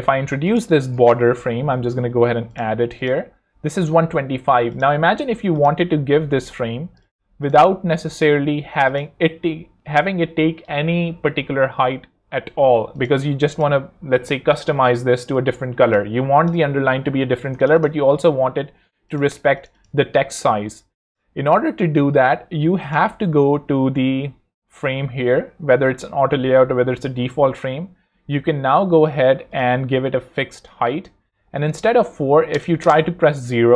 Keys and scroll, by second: 0.7 super+r, 0.9-2.0 typing, 17.8-19.1 typing, 20.0 shift+super+Escape, 20.2 shift+super+t, 20.3 shift+e, 32.5 0, 32.8 Home.